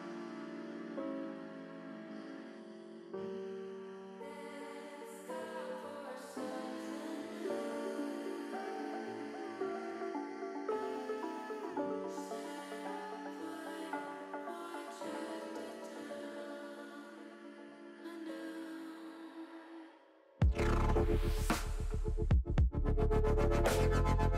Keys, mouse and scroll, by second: 3.6 click, 4.3 l, 6.5 l, 7.3 click, 8.2 click, 9.5 click, 14.7 alt+shift+click, 16.9 ctrl+KP_Add, 17.0 ctrl+KP_Add, 17.2 ctrl+KP_Add, 17.3 ctrl+KP_Add, 17.7 ctrl+KP_Add, 18.1 ctrl+KP_Add, 18.4 ctrl+KP_Add, 18.7 ctrl+KP_Add, 19.0 ctrl+KP_Add, 19.9 ctrl+KP_Subtract, 22.5-24.3 drag.